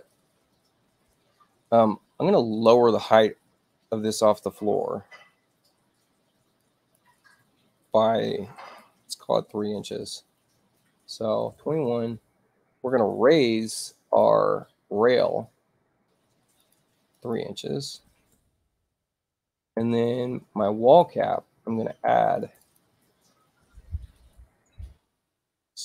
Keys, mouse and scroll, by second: 6.6 click, 11.5 2, 12.1 Tab, 14.0 click, 16.6 click, 17.1 click, 18.3 Tab, 20.8 click, 22.4 click, 22.6 click, 24.3 Tab.